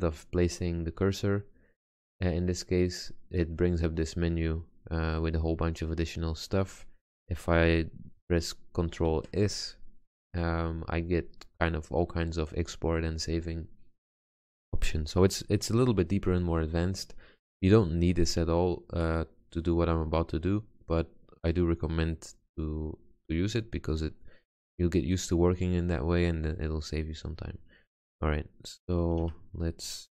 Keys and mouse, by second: 9.1 ctrl+s, 15.9-16.9 middle drag, 19.5 middle click, 23.2-25.0 drag, 25.0-26.4 middle drag, 29.3 Tab.